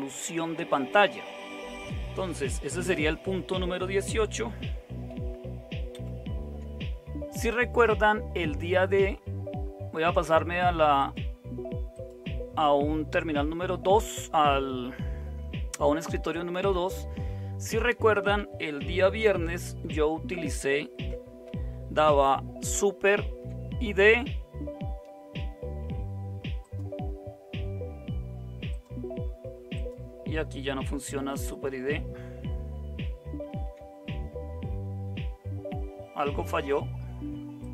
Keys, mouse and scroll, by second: 5.9 super+0, 23.0 super+d, 33.4 super+d.